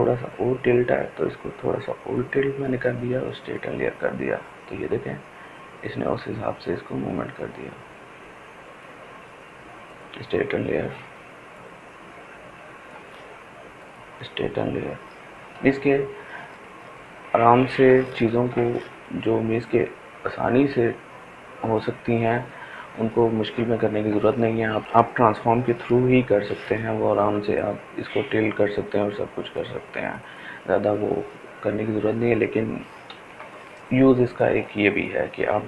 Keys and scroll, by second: 17.9 ctrl+t, 25.7 ctrl+t, 32.7 ctrl+t.